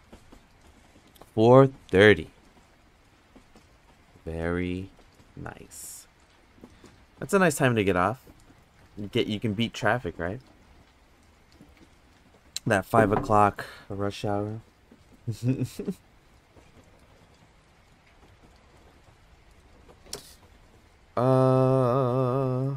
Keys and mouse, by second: 22.4 click.